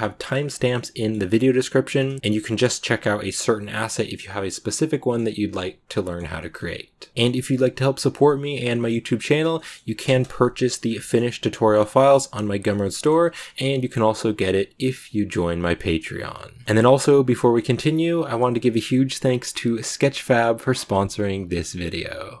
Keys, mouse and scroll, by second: 6.2 shift+middle click, 7.1 a, 7.4 shift+middle click, 7.9 a, 9.4 shift+middle click, 9.9 ctrl+space, 10.7 scroll down 1, 10.8-22.4 shift+middle drag.